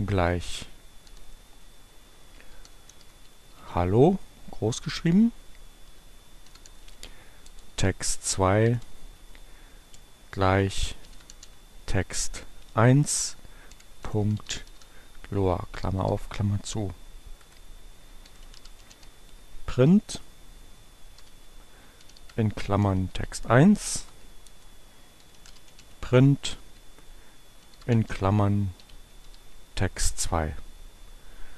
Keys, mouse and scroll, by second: 1.5-4.6 typing, 4.4 Return, 6.2-8.0 typing, 9.2 space, 9.5 t, 10.9-15.5 typing, 16.8 Return, 18.0-19.3 typing, 21.1-29.1 typing, 24.3 shift+Return.